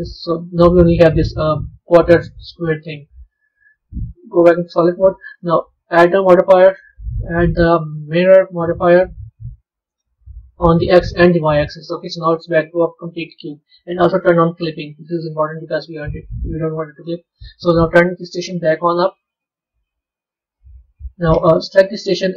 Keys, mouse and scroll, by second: 2.7 Tab, 3.4 z, 4.3-5.8 middle drag, 5.8-8.9 drag, 11.0 click, 11.7-14.5 middle drag, 14.5 click, 18.4 click, 19.0 scroll down 2, 20.2-21.6 middle drag, 21.6 click.